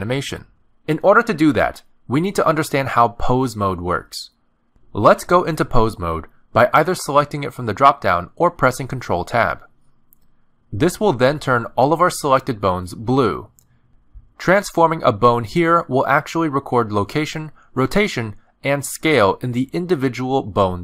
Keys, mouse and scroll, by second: 1.6 click, 8.1 middle click, 11.2 click, 12.2 click, 13.0 middle click, 15.1 click, 16.8 middle click, 16.8 r, 18.2 g, 19.2 click, 19.9 r.